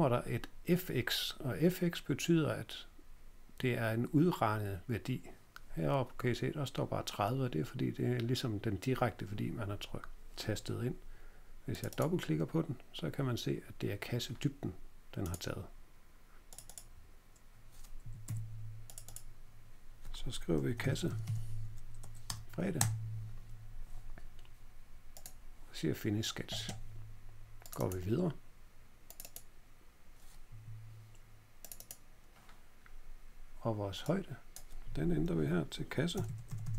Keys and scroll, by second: 18.0 Escape, 18.2 Escape, 20.4-21.7 typing, 22.0 Page_Up, 22.2 Return, 22.7 Return, 30.4 Home, 35.9-36.7 typing.